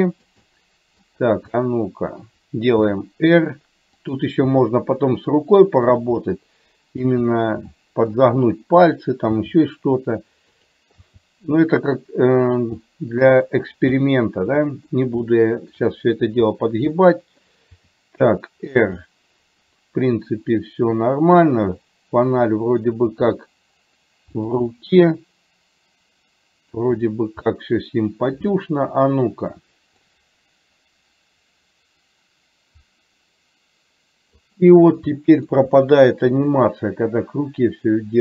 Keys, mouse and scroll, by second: 0.5-2.4 middle drag, 3.3 r, 4.6 g, 6.3 middle click, 7.9 middle click, 9.5 r, 11.3 g, 12.9 middle click, 14.0-15.0 middle drag, 15.3 shift+middle click, 17.1 middle click, 17.9 r, 19.0-22.4 middle drag, 23.3 r, 24.8-26.9 middle drag, 27.5 middle click, 30.1-34.5 drag, 35.3 shift+middle click, 36.8-38.2 drag.